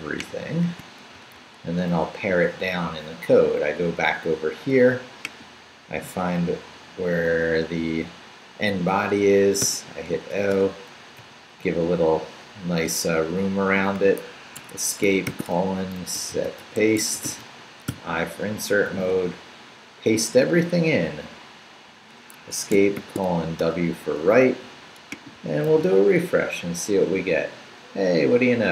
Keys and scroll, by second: 1.4 shift+super+c, 1.9 super+c, 6.4 Down, 9.6 o, 10.1 Return, 11.0 Up, 11.9 Return, 14.6 Escape, 15.3-17.9 typing, 18.4 super+i, 18.9 super+v, 22.3 Escape, 23.0 shift+;, 23.3 shift+w, 23.6 Return, 25.7 super+r.